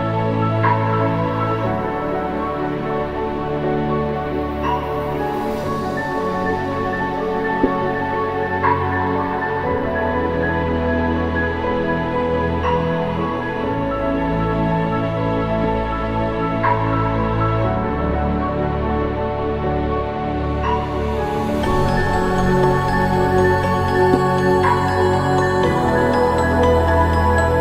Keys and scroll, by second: 12.4 ctrl+=, 15.3 ctrl+-, 16.4 ctrl+=.